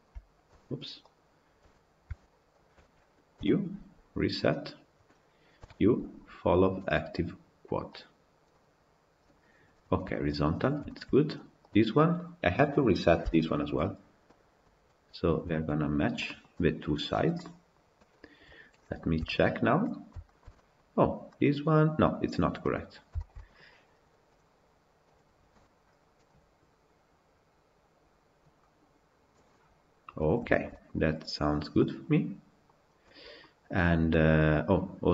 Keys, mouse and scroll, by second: 0.3 click, 2.3 shift+click, 4.6 u, 10.7 shift+middle click, 11.4 click, 14.4 u, 15.4 Tab, 15.8 scroll down 3, 16.0-17.0 middle drag, 17.0 scroll down 1, 17.2-18.4 middle drag, 18.4 click, 19.0 KP_Decimal, 19.6-24.2 middle drag, 24.2 click, 29.3-30.1 middle drag, 30.1 scroll up 1, 30.3-30.8 shift+middle drag, 30.8-31.6 scroll up 2, 31.6-32.7 middle drag, 32.7 scroll down 2, 32.9-35.1 middle drag.